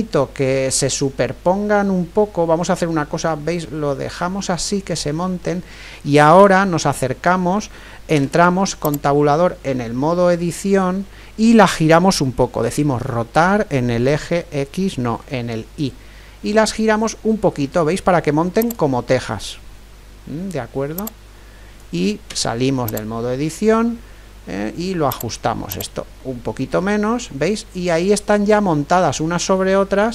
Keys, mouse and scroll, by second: 4.7-9.0 middle drag, 8.2 Tab, 9.5-11.3 middle drag, 12.6 r, 21.0-23.0 drag, 22.3 Tab, 25.1-27.6 drag, 27.3-30.1 middle drag.